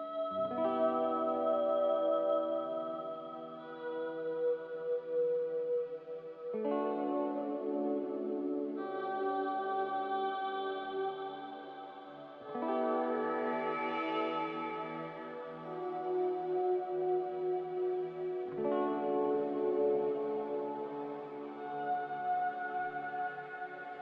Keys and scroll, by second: 5.6 s, 7.4 typing, 9.1 Tab, 9.3-10.0 typing, 10.5 Return, 13.6 3, 13.7 Return, 15.4 2, 15.5 Return, 16.2 z, 16.8 a, 21.1 Return.